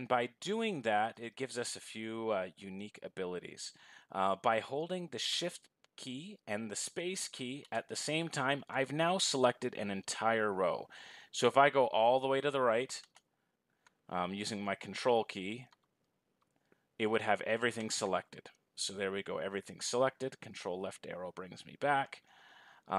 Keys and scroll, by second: 7.0 shift+space.